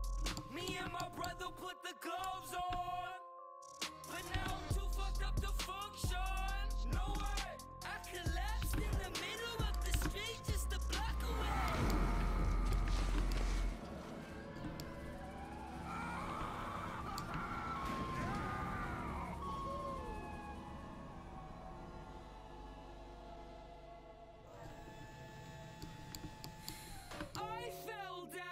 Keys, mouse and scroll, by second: 0.0 a, 2.2-6.5 drag, 2.6 g, 4.4 g, 6.7-8.0 drag, 7.2 ctrl+z, 7.9 a, 8.3 click, 8.6-10.8 right drag, 8.6 g, 10.0 g, 10.9 a, 11.7 middle click, 12.2 Tab, 12.9 Tab, 16.5 a, 17.4 a, 17.9 Tab, 20.0 middle click, 25.4 Tab.